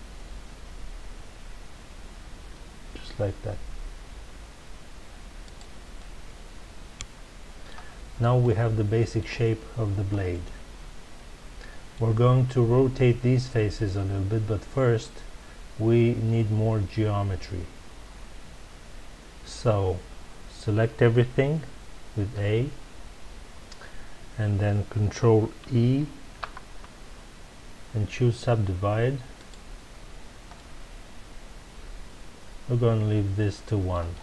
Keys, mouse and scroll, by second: 5.5 click, 5.9-7.9 middle drag, 7.9-8.4 scroll down 2, 8.4-13.3 middle drag, 22.3 a, 30.5-33.6 middle drag.